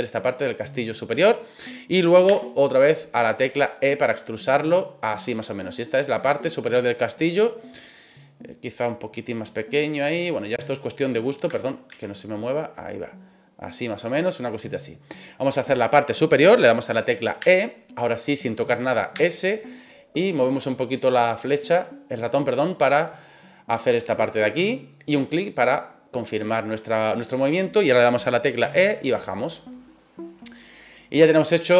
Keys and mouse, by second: 2.3 e, 5.1 click, 5.5-8.2 middle drag, 8.9 click, 9.9-11.1 drag, 11.8 ctrl+z, 12.5-13.6 drag, 13.9-15.4 middle drag, 17.4 e, 19.1 s, 24.7 click, 25.2-27.3 middle drag, 28.6 e, 29.9 click, 30.2-31.7 middle drag.